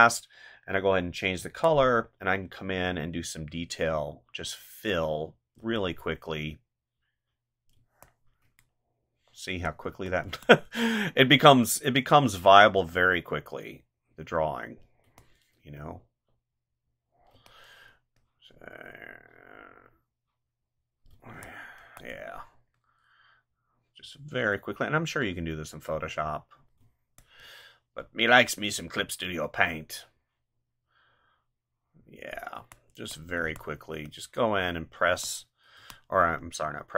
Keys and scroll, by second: 1.4 space, 5.6 space, 7.7 space, 15.0 space, 17.3 space, 21.1 space, 26.8 space, 32.5 space, 35.1 space.